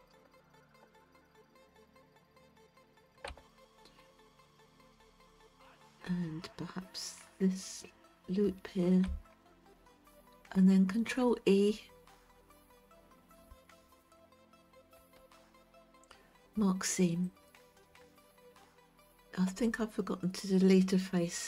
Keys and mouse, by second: 2.5 shift+middle click, 8.1 shift+click, 11.7 middle click, 15.3 ctrl+e.